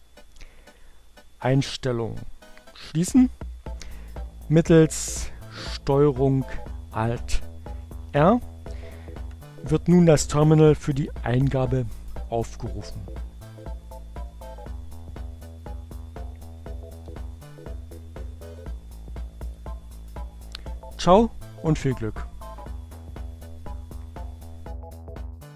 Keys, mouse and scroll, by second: 2.5 click, 6.3 ctrl+alt+r, 11.7-13.8 drag, 16.1 ctrl+alt+r, 18.3-19.7 drag.